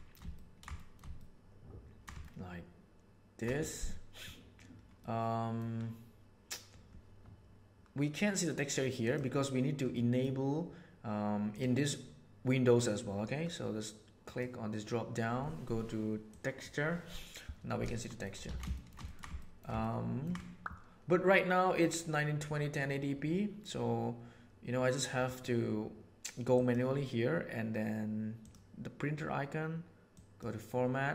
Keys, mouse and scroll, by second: 0.7 shift+click, 1.1 ctrl+click, 2.2 shift+click, 5.0 click, 9.9 click, 11.5 click, 14.2-16.8 drag, 18.0 shift+click, 18.4 alt+a, 18.6 shift+click, 19.0 ctrl+click, 19.3 shift+click, 26.4 click, 28.3 click, 30.0 click.